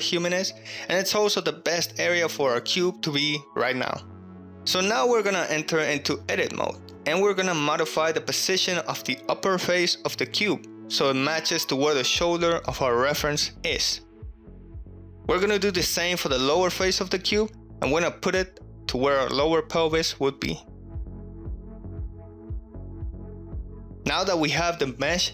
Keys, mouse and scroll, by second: 0.0 ctrl+scroll down 1, 0.1 ctrl+middle click, 3.1-4.5 middle drag, 4.8 KP_1, 5.0 Tab, 5.4-5.7 shift+middle drag, 6.1-6.8 middle drag, 6.8 3, 7.2 click, 8.3 KP_1, 9.5 g, 9.5 z, 10.6 click, 11.1 s, 11.2 x, 12.3 drag, 13.2 shift+middle drag, 16.2 alt+z, 16.6 click, 18.7 g, 18.9 z, 20.5 click, 21.5 alt+z, 21.8 ctrl+middle click, 22.1-23.0 middle drag, 23.3 middle click.